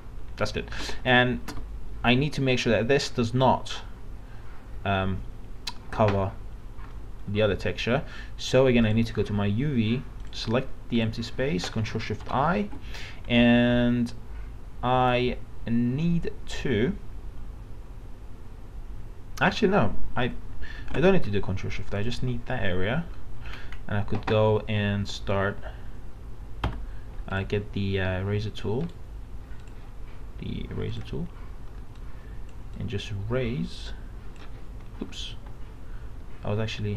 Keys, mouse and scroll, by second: 0.9 alt+Tab, 6.9 middle click, 8.9 click, 12.3 ctrl+shift+i, 20.8 ctrl+shift+d, 22.0 click, 23.5 alt+scroll down 1, 26.7 e, 27.3 click, 28.1 e, 28.8 right click, 29.6-35.1 drag, 35.3 ctrl+z, 36.6 z.